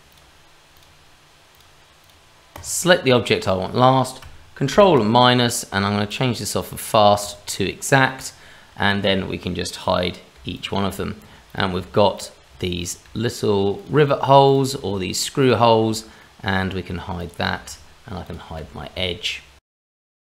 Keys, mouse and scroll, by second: 3.1 shift+middle click, 4.7 ctrl+KP_Subtract, 6.1 click, 10.4-14.7 typing, 10.5 click, 11.5 click, 12.1 click, 12.8 click, 13.8 click, 14.5 click, 15.4 click, 15.8 h, 16.2 middle click, 17.2 click, 17.5 h, 18.2 click, 18.6 h, 19.7 h, 20.1 middle click.